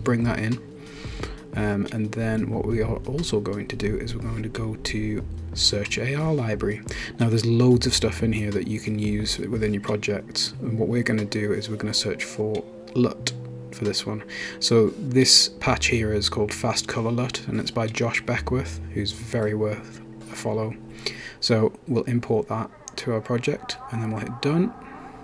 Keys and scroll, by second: 10.3 typing, 11.5-12.2 typing, 13.5 Return.